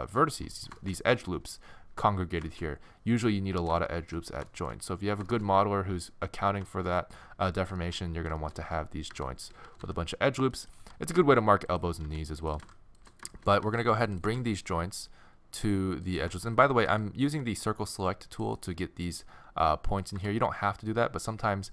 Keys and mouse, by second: 9.1-10.8 typing, 12.1 r, 12.1 click, 12.6 g, 13.4 middle click, 13.7 a, 13.8 c, 14.3 g, 16.1 right click, 16.4 middle click, 16.9 a, 17.3 c, 18.4-20.0 drag, 20.2 g.